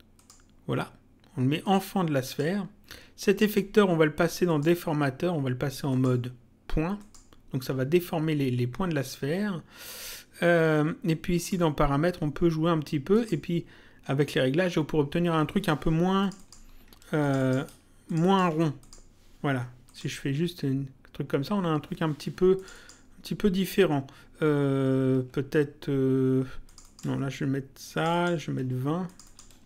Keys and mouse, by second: 0.2 click, 1.6 click, 3.2 click, 4.5 click, 5.9 click, 7.0 click, 11.4 click, 13.2 click, 16.2 click, 22.6 click, 26.6 click, 27.9 click.